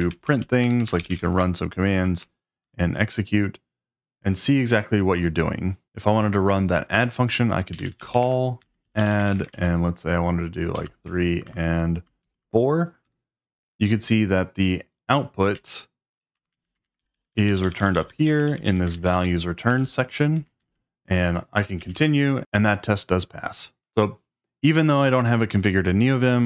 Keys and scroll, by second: 0.0-2.6 typing, 7.5-12.2 typing, 13.0 Return, 15.5-20.6 typing, 16.7 ctrl+a, 20.3 Escape, 21.8 typing, 21.9 Return.